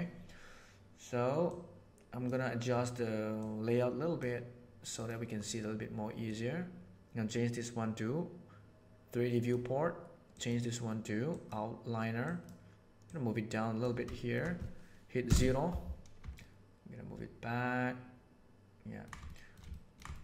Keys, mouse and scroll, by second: 1.4 click, 3.4 click, 4.9-9.4 drag, 10.2-11.4 drag, 12.2 right click, 13.0 right click, 14.1 shift+middle click, 15.2 KP_0, 16.4-19.0 ctrl+middle drag, 19.2 shift+middle click, 19.7 ctrl+middle click, 20.1 shift+middle click.